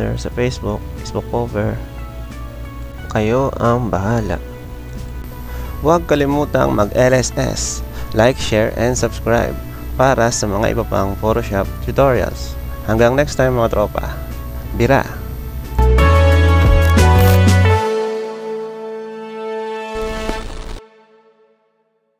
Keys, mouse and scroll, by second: 0.9 click, 1.8 click, 3.2 click, 4.0 click, 4.9 click, 5.5 click, 13.4-14.7 drag.